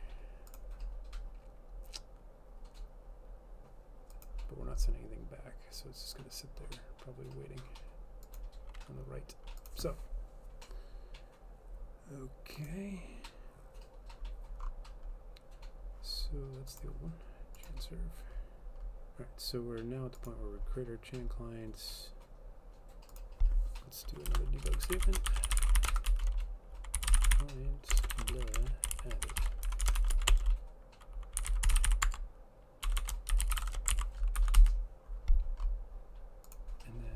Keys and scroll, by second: 24.4 Return, 24.6-35.2 typing.